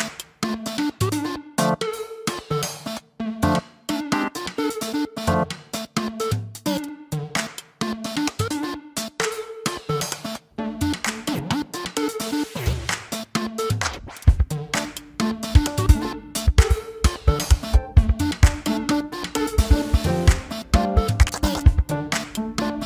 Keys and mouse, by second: 7.8 typing.